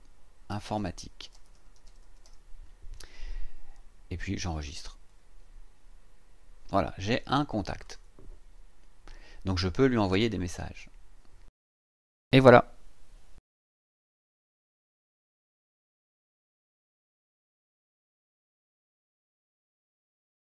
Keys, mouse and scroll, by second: 0.0-2.7 typing, 4.5 click, 7.8 click, 12.6 click, 13.9 click.